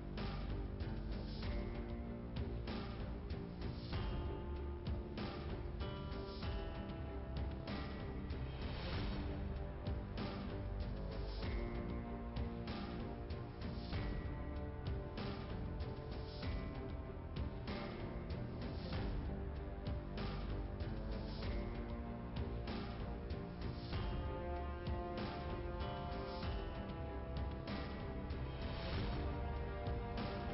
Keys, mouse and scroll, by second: 1.1 click, 1.8-2.3 scroll down 1, 2.3 click, 2.6 click, 3.9 click, 4.9 click, 7.5 click, 8.7 click, 9.2 click, 11.1 click, 11.6 click, 13.7 click, 16.5 click, 17.0 click, 18.0 click, 18.4 right click, 19.9 click, 20.8 click, 21.6 click, 22.3 click, 23.5 click, 25.9 click, 29.1 click, 29.9 click.